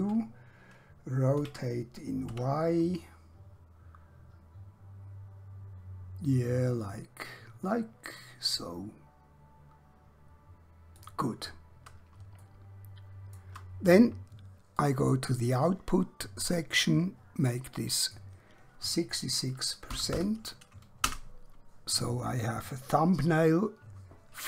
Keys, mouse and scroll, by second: 2.3 r, 11.0 click, 12.5 shift+middle click, 14.8 click, 18.1 click, 19.9 6, 21.0 typing, 21.1 Return.